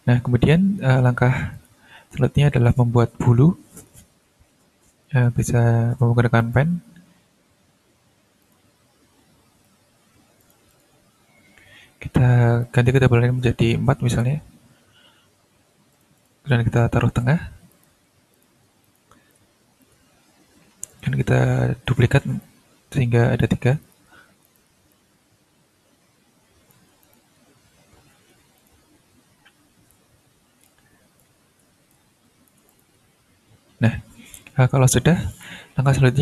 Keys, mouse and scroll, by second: 1.5 click, 2.4 ctrl+scroll up 2, 6.4 click, 8.4 click, 10.4 ctrl+click, 10.7 ctrl+right click, 12.6 click, 13.7 4, 14.2 Return, 15.9 click, 17.7 click, 18.3 click, 18.8 click, 19.3 ctrl+click, 20.9 click, 21.5-22.3 ctrl+scroll up 2, 22.3 ctrl+d, 22.4 ctrl+click, 23.8 ctrl+click, 24.4 ctrl+click, 24.8 ctrl+d, 24.9-26.9 ctrl+drag, 27.0 ctrl+click, 27.3-28.2 ctrl+scroll down 1, 28.5 ctrl+click, 30.1-30.6 ctrl+scroll up 2, 30.6 ctrl+click, 31.4 ctrl+scroll up 2, 31.9 ctrl+click, 33.0-33.8 ctrl+scroll down 1, 34.0 ctrl+scroll up 1, 34.4 shift+scroll down 2, 34.8-35.2 shift+scroll up 2, 35.3 click.